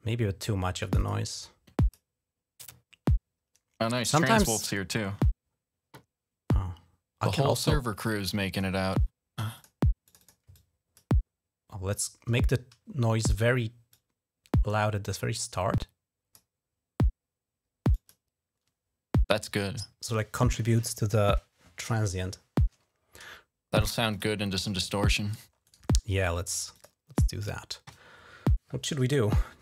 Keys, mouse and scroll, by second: 0.5 click, 0.8 click, 1.1 click, 3.6 click, 3.7 click, 4.1-7.0 drag, 7.3-8.4 drag, 8.7 click, 9.3 click, 9.9 click, 10.0 click, 10.3 click, 13.7-16.1 drag, 17.7 click, 23.9 click, 25.4 right click, 26.5 click.